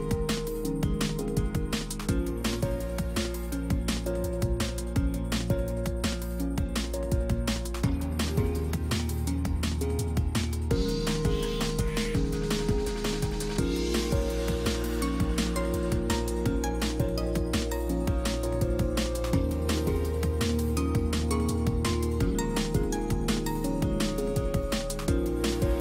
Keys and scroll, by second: 20.3 Escape.